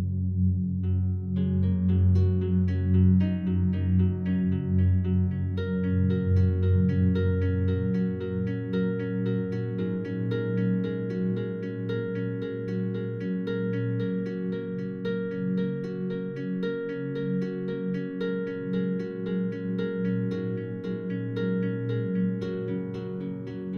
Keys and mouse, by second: 0.0 Tab, 1.1-1.8 drag, 2.0-3.2 drag, 3.2 Tab, 3.8-5.2 alt+drag, 7.4 click, 8.9 click, 9.5 click, 10.9 Tab, 10.9 g, 11.3 z, 12.0 click, 12.9 r, 13.3 Escape, 13.9 click, 15.1 e, 15.6 r, 16.0 x, 16.8 click, 17.5 ctrl+z, 17.6 ctrl+z, 18.6 click, 19.9 r, 20.1 x, 21.1 click, 21.5 click, 22.8 g, 23.1 z.